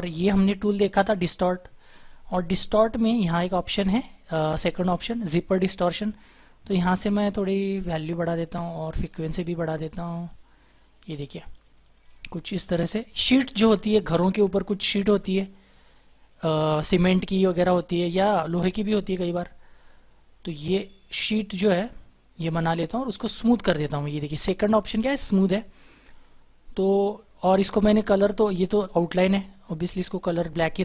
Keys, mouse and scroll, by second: 6.9 double click.